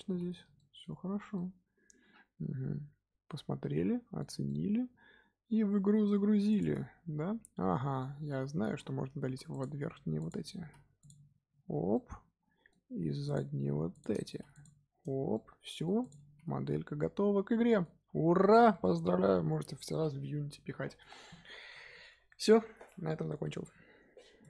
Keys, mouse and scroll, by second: 0.5-4.3 shift+middle drag, 4.4-6.5 middle drag, 6.5 click, 7.9-8.4 middle drag, 8.4 Tab, 8.6 z, 8.9-9.2 scroll up 2, 9.2 3, 9.5 click, 10.1 shift+click, 10.6 x, 11.4-11.9 scroll down 3, 11.9-13.2 middle drag, 13.2 click, 13.9 shift+click, 14.3 x, 15.0 Tab, 15.3-16.0 middle drag, 16.0 click, 16.2 z, 16.6-18.1 middle drag, 18.1 scroll down 1, 18.4-21.7 shift+middle drag.